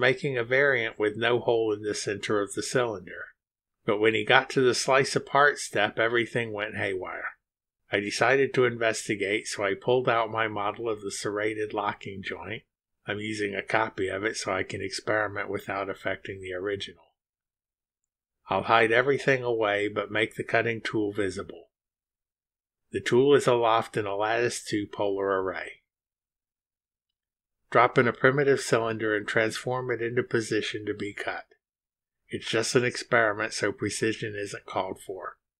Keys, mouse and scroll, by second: 19.4 click, 19.5 space, 21.2 click, 21.4 space, 23.2 click, 23.4 space, 24.9 click, 27.1 click, 29.6 scroll down 2, 30.5 click, 31.7 click, 32.7-34.2 drag, 35.1 click.